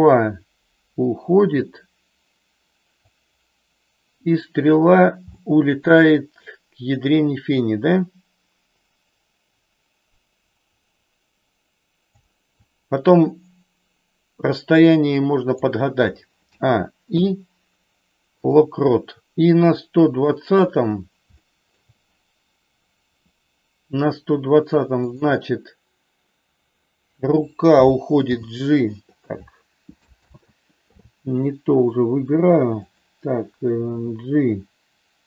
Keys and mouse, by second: 4.3 click, 5.4 shift+middle click, 8.0-12.2 drag, 14.6-15.6 drag, 16.4 a, 17.0 i, 20.2 click, 21.3 shift+middle click, 25.0 click, 28.3 g, 30.2 ctrl+z, 32.8 click, 33.8 g.